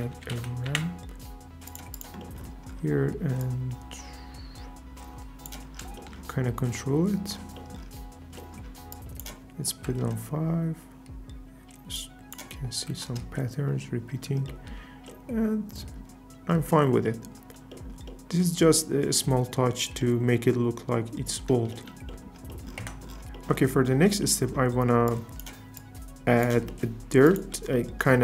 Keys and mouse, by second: 2.0 click, 2.1 typing, 3.4-5.5 drag, 5.9 shift+middle click, 9.0-10.1 drag, 11.9-13.1 drag, 14.5 shift+middle click, 22.8 Tab, 23.2 alt+s, 23.4 click, 24.2 click, 25.1 click, 27.2 click.